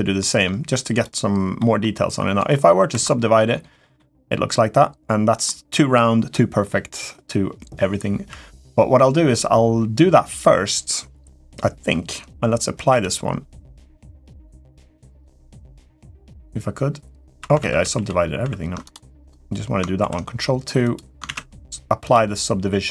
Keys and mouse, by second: 0.7 click, 1.3 middle click, 3.0 ctrl+2, 3.7-5.2 middle drag, 14.9 click, 17.1 click, 17.4 ctrl+z, 17.9 ctrl+z, 18.1 ctrl+z, 18.2 ctrl+z, 19.0 click, 19.8 ctrl+2, 20.6 click, 21.0 ctrl+a, 21.9-22.8 drag.